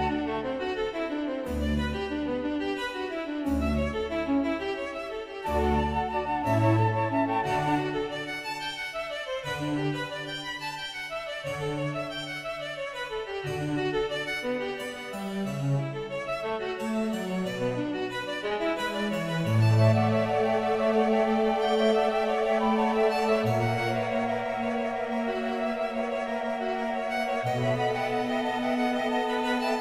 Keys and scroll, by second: 4.6 space, 8.5 space, 17.0 space, 24.8 space.